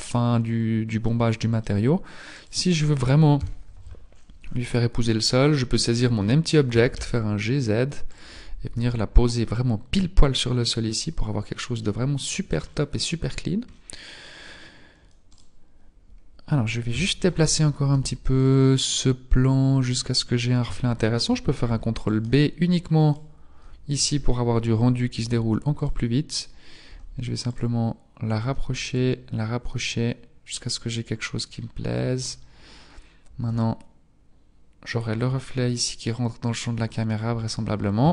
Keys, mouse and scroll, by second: 0.4-1.0 scroll down 2, 1.0 middle click, 2.2 right click, 3.4 KP_3, 4.0-5.1 scroll up 10, 5.1-5.5 scroll up 1, 5.5 scroll down 9, 6.8-7.3 scroll up 1, 6.8 g, 11.0-11.8 scroll down 4, 11.8 middle click, 12.6-13.7 scroll down 6, 13.7-14.4 scroll down 5, 15.3 right click, 16.9 KP_7, 17.8 g, 19.7-20.1 scroll up 3, 20.7 shift+middle click, 21.6 ctrl+b, 23.1 scroll up 1, 25.0 g, 26.8 g, 28.4 g, 31.4-33.0 scroll down 6, 33.0-35.4 scroll down 2.